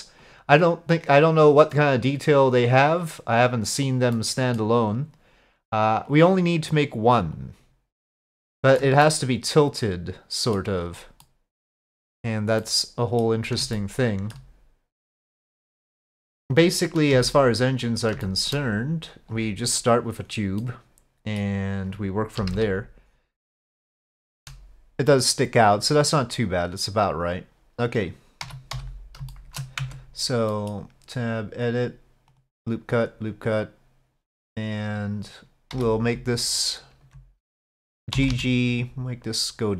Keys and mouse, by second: 0.3-3.8 drag, 4.2-4.7 middle drag, 6.1 click, 7.4 click, 8.5-8.9 shift+middle drag, 9.1-10.6 middle drag, 11.3-11.8 middle drag, 12.7-13.4 drag, 13.8-14.4 shift+drag, 15.1-15.5 drag, 17.1 s, 18.3 shift+middle drag, 20.7-21.4 middle drag, 22.4 KP_5, 22.5 KP_1, 23.1 click, 24.3 shift+middle click, 27.3 click, 28.5 z, 29.3 shift+click, 29.8 Tab, 30.5 click, 31.7 click, 32.3 click, 33.1 click, 34.9 click, 35.8 2, 38.2 g.